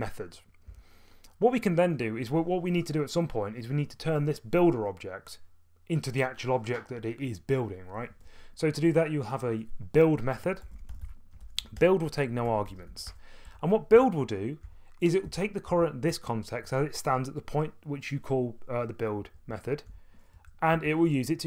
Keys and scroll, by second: 0.7 Tab, 10.4-13.4 typing, 13.9 Up, 14.6 Tab, 14.6-16.2 typing, 15.2 Return, 19.5-19.9 typing, 20.3 Up, 20.7 Tab.